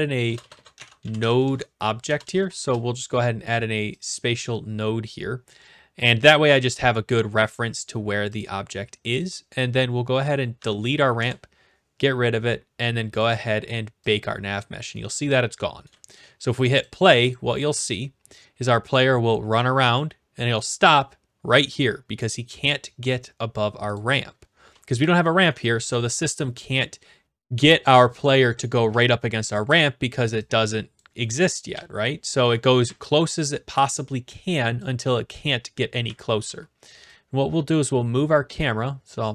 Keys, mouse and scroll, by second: 0.0-2.1 typing, 4.6 click, 7.5 click, 8.4 click, 9.4 click, 10.5 Delete, 11.2 Return, 12.3-13.1 scroll, 13.2 click, 14.2 click, 15.0-15.7 s, 15.8 scroll, 15.8 s, 16.8 click, 17.3 click, 23.9-25.1 drag, 25.5 s, 26.4 right click, 28.0 click, 28.9-30.1 typing, 31.0 click, 31.3 a, 31.7 shift+s, 32.7 right click, 32.9 e, 34.8 click, 36.0-36.4 typing, 37.7 click, 38.6 click.